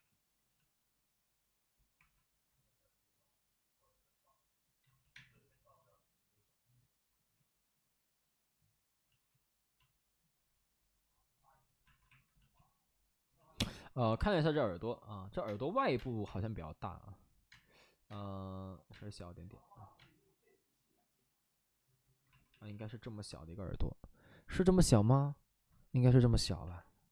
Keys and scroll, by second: 1.9 2, 4.8 ctrl+z, 4.9 ctrl+z, 5.0 space, 11.8 alt+s, 13.9 alt+s, 14.1 space, 15.4 space, 15.7 3, 15.8 space, 16.1 3, 17.4 space, 18.0 space, 18.8 space, 19.9 space, 22.5 alt+s.